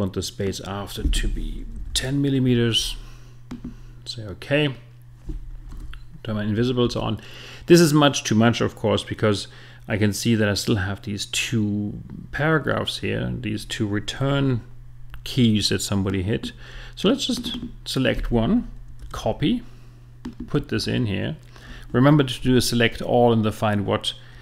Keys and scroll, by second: 1.7 i.